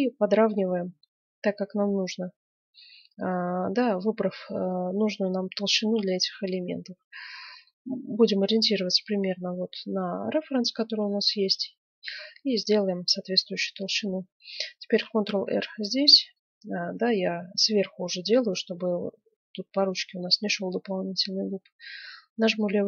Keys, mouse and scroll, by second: 7.8-9.8 middle drag, 10.7-12.8 middle drag, 14.8 ctrl+r.